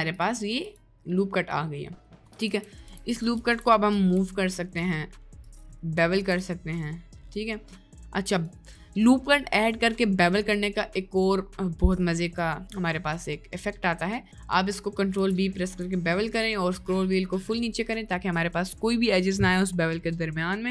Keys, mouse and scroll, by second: 0.2 click, 0.7 click, 1.7 middle click, 2.4 ctrl+z, 2.8 ctrl+z, 3.4 ctrl+z, 4.2 g, 6.2 ctrl+b, 14.1 middle click, 14.6 middle click, 15.2 ctrl+b.